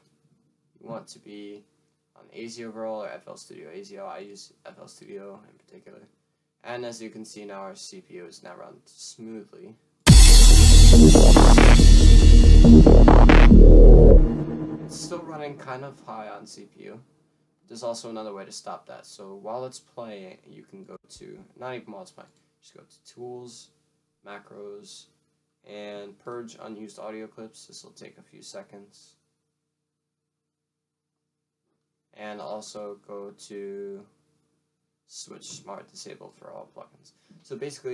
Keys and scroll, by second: 6.8 F1, 7.7 F1.